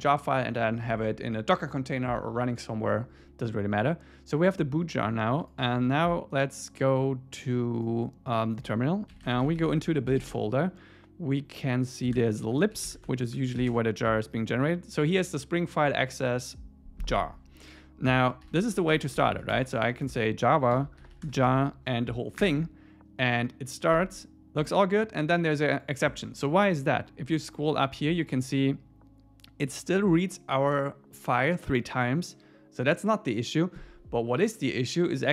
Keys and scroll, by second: 9.7 Tab, 9.9 Return, 13.1 Tab, 13.3 Return, 21.5 Tab, 22.4 Return.